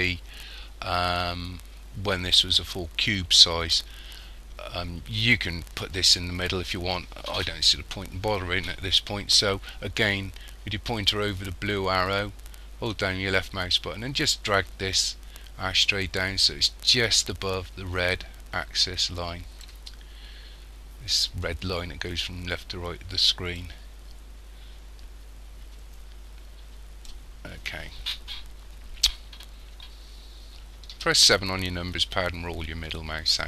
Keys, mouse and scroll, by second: 12.9 click, 20.1-21.1 scroll up 3, 23.6 click, 31.0 KP_7, 31.9-33.4 scroll down 10.